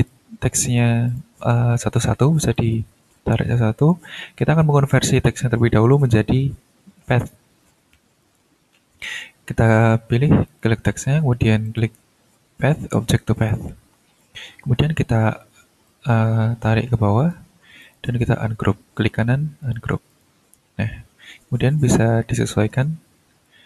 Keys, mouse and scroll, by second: 1.1 click, 2.5-4.1 drag, 7.9 click, 8.7 middle click, 10.4 click, 11.6 click, 13.3 click, 15.8-17.5 drag, 17.8 right click, 19.6 click, 20.1 click, 21.2-21.5 ctrl+scroll up 1, 21.7-23.6 ctrl+drag.